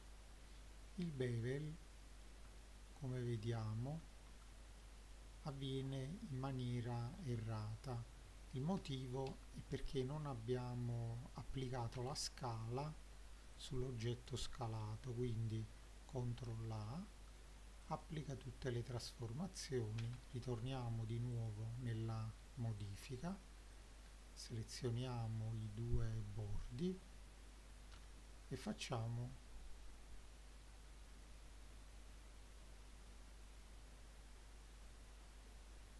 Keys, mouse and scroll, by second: 0.0-1.2 drag, 0.5 scroll down 1, 1.0 alt+middle click, 2.0 middle click, 2.5 shift+middle click, 4.0-4.8 scroll up 3, 4.8-5.2 middle drag, 7.2 Tab, 8.8 ctrl+z, 9.3 ctrl+z, 10.0 click, 12.0 Tab, 13.6 click, 16.3 ctrl+a, 20.0 Tab, 21.4 click, 22.8 ctrl+click, 23.8 click, 24.4 click, 25.7 shift+click, 28.0 ctrl+b.